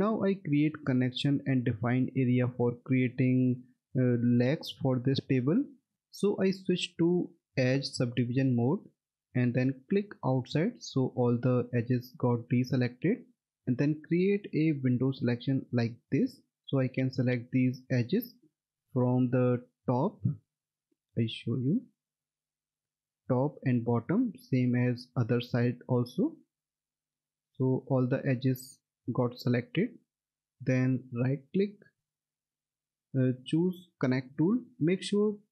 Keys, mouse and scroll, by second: 7.8 click, 13.8 click, 18.7 middle click, 20.1-20.6 scroll up 1, 20.6-21.2 scroll down 1, 21.2 middle click, 22.1 F3, 24.1-24.6 scroll down 1, 25.2 middle click, 25.4-25.8 scroll down 1, 25.8 alt+middle click, 26.8 middle click, 27.3 alt+middle click, 28.5-29.4 scroll up 1, 30.2 middle click, 31.1 right click.